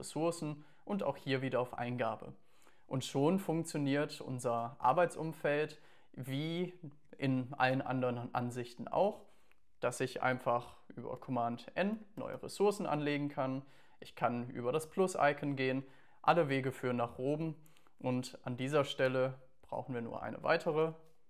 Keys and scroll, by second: 11.2 super+n, 19.1 BackSpace, 20.3-21.2 typing.